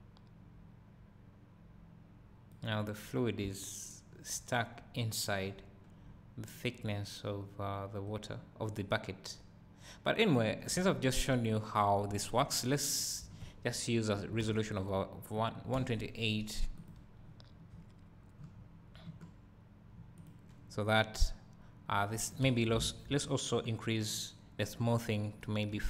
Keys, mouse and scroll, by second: 3.5 `, 6.1-6.8 scroll up 2, 12.4 Escape, 21.1-25.8 drag, 22.6 Escape.